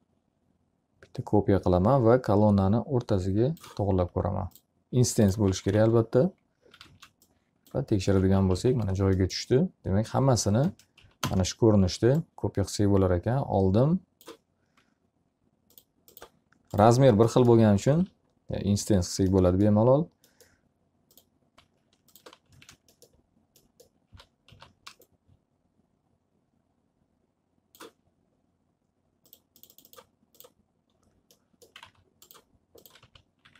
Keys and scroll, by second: 5.8 z, 6.4 alt+a, 7.6 space, 8.8 ctrl+z, 9.2 s, 11.3 space, 11.7 s, 12.0 space, 18.2 alt+a, 22.7 w, 23.3 space, 24.8 s, 32.2 alt+a.